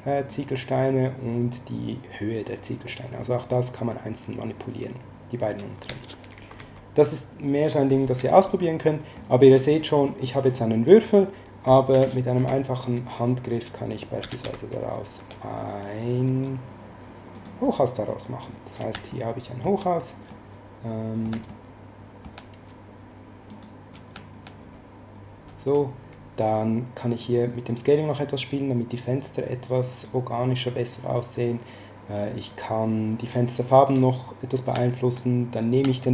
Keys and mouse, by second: 0.8 click, 6.3 ctrl+z, 8.6 middle click, 11.9 s, 13.8 right click, 14.0-15.1 typing, 17.3 click, 19.1 shift+middle click, 20.3 middle click, 21.5 shift+middle click, 23.5 click, 27.2 click, 31.3 click, 34.6 right click, 35.5 right click.